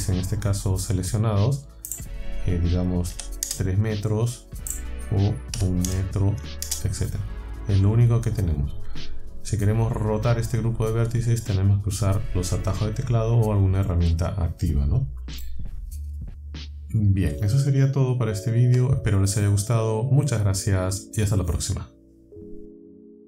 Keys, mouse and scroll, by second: 2.0 click, 3.2 KP_3, 3.5 KP_Enter, 4.7 click, 5.6 KP_1, 6.7 KP_Enter, 18.6 Tab.